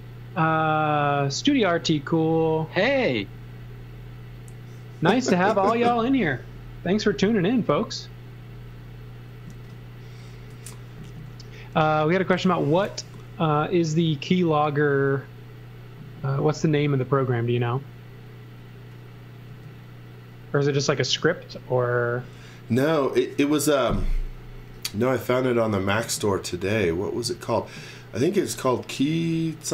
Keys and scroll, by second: 9.4 z, 10.5 x, 13.0 l, 19.5 space.